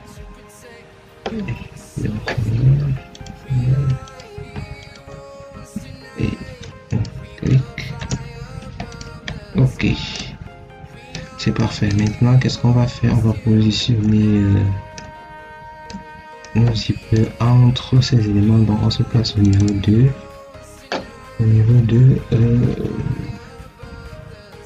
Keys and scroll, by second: 9.0 Return.